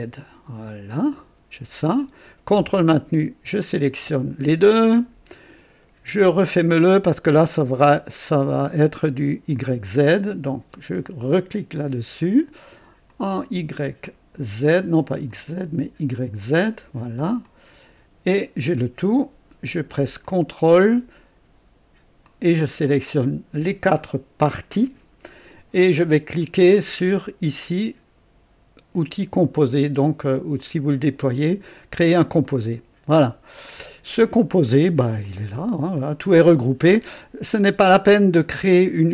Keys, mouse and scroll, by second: 0.9 click, 3.5 ctrl+click, 11.7 click, 13.0 click, 14.0 click, 15.3 click, 16.4 click, 17.4 click, 20.2 ctrl+click, 22.2 ctrl+click, 30.5 click, 32.4 click, 34.5 right click, 35.2 click.